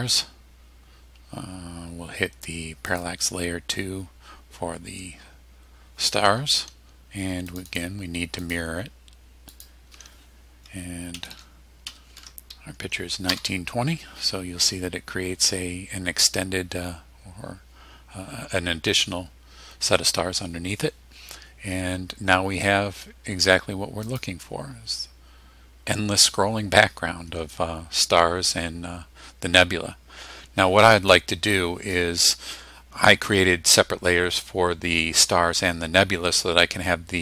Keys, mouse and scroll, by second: 2.9 click, 7.5 click, 8.4 click, 9.5 click, 11.1 KP_1, 11.3 KP_9, 11.9 KP_2, 12.1 KP_0, 13.3 Return, 24.0 click.